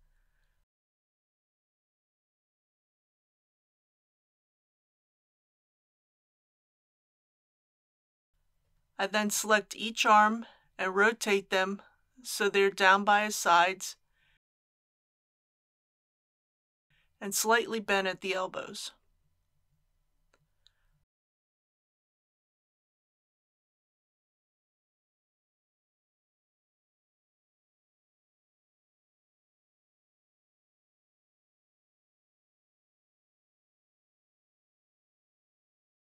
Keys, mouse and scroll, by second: 0.9 g, 5.2 click, 8.0 KP_1, 9.9 click, 10.9 r, 11.4 r, 11.4 y, 16.3 click, 17.7-19.1 middle drag, 19.4 r, 19.4 x, 21.5 click, 22.3 KP_1, 24.1 click, 25.0 r, 25.2 y, 29.6-31.1 middle drag, 31.1 r, 31.4 x, 33.3 click.